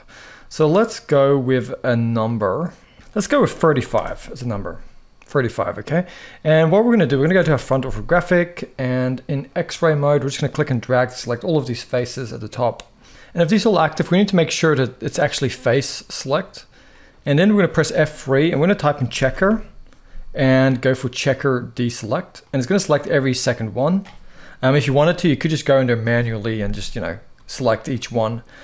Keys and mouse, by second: 0.1 middle click, 1.9-3.7 drag, 6.2 click, 7.1 KP_1, 10.3 click, 11.6-12.7 middle drag, 13.1 ctrl+z, 14.4 click, 16.6 middle click, 17.6 F3, 22.1 middle click, 27.2 shift+middle click, 27.8 middle click.